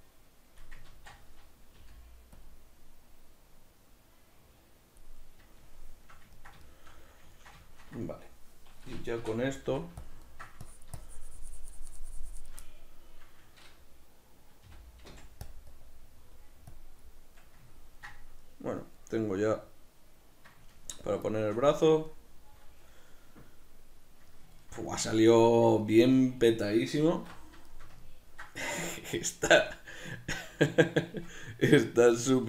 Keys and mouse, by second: 1.0 ctrl+z, 1.8 f, 3.2-5.2 drag, 5.2-10.2 middle drag, 9.3 i, 10.2 click, 10.3 ctrl+middle click, 10.7-12.7 drag, 12.7-15.6 middle drag, 14.8 g, 15.8-17.4 drag, 17.4 middle click, 21.7 Tab, 22.1 middle click, 24.7-32.4 ctrl+middle drag, 27.2 alt+q.